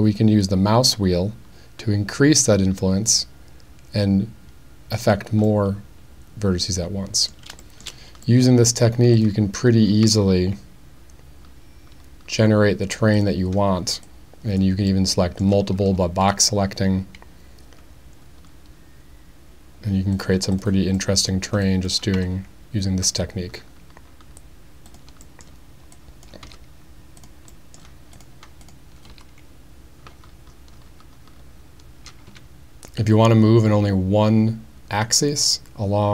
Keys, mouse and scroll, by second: 5.0 click, 5.4-7.3 middle drag, 7.7 shift+middle click, 8.4 middle click, 9.2 click, 10.0 g, 13.1 click, 14.1 click, 14.9-15.4 middle drag, 16.2 g, 20.1 click, 20.5 click, 21.0 middle drag, 21.7 click, 22.2 g, 24.9 click, 25.2 middle drag, 25.3 click, 25.9-26.6 drag, 26.4 g, 27.2 click, 27.6 middle click, 29.1 g, 32.3 z.